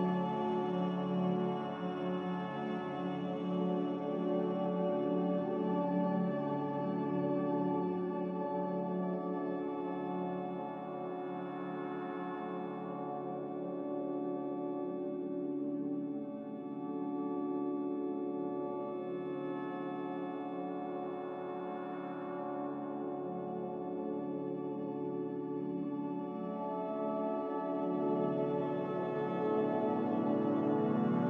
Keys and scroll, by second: 5.6 z, 7.3 Delete, 9.1 ctrl+c, 15.3 a, 16.4 Delete, 17.9 ctrl+c, 21.8 g, 24.2 z, 25.0 Delete, 27.4 a.